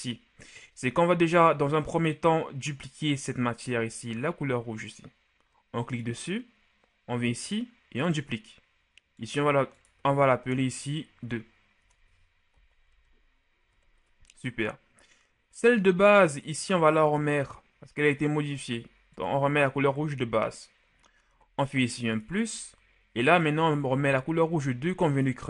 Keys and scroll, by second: 10.6-12.9 typing, 13.6 Return.